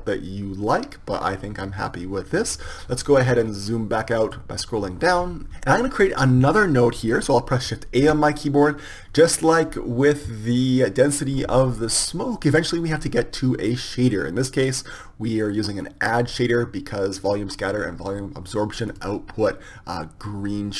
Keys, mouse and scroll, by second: 8.1 shift+a, 16.0-20.7 drag.